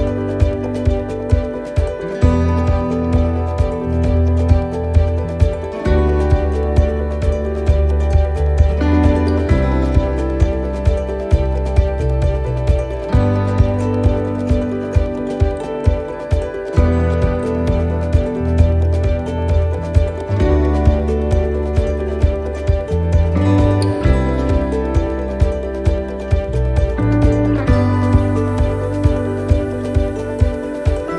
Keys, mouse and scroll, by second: 0.1 middle click, 0.7-1.1 scroll up 2, 1.1 middle click, 1.7-2.1 scroll up 2, 2.1 middle click, 3.0 middle click, 6.1 click, 10.1 click, 11.2 s, 16.6 middle click, 16.6 r, 17.9 middle click, 19.1 click, 21.9 click, 21.9 middle click, 22.9 middle click, 23.7 click, 24.9 s, 27.0 s, 28.8 middle click, 29.5-30.0 scroll up 1, 30.6 ctrl+r.